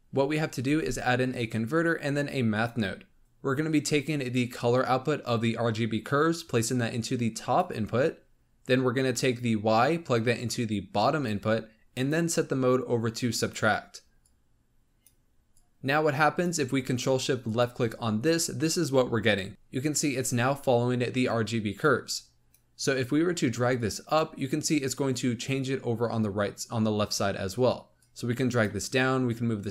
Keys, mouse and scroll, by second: 0.6 shift+a, 4.2 click, 9.3-14.2 drag, 15.4 click, 17.4 ctrl+shift+click, 21.7 click, 22.8-23.7 scroll up 2, 23.7-26.7 drag, 27.9-29.7 drag.